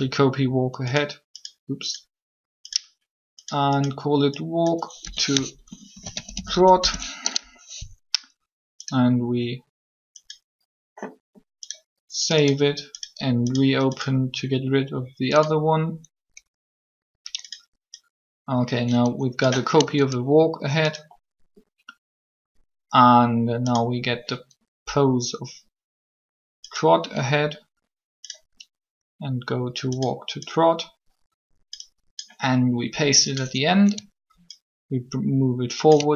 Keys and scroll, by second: 5.0 2, 5.7 shift+t, 6.8 Return.